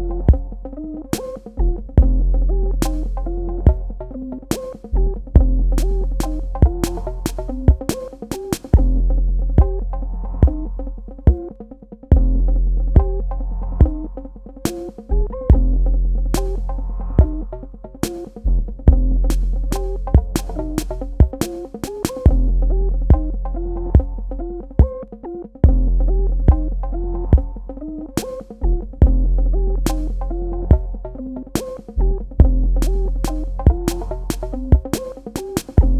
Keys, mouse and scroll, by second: 5.2 Escape, 7.9 click, 14.4 space, 17.1 space, 18.6 click, 23.4 i, 25.2 click, 26.2 v, 26.5 click, 31.5 click.